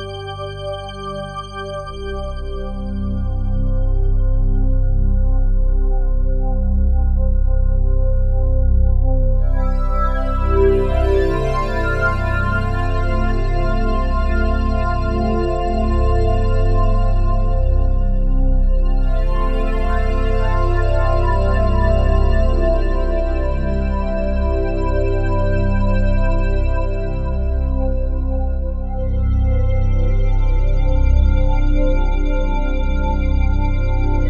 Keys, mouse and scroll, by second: 0.3 alt+shift+drag, 0.8-2.3 ctrl+alt+drag, 2.3 typing, 4.0-10.0 shift+drag, 10.0 typing, 11.8 typing, 13.3 click, 16.0 alt+shift+drag, 16.5-17.1 ctrl+alt+drag, 17.7-34.2 alt+shift+drag.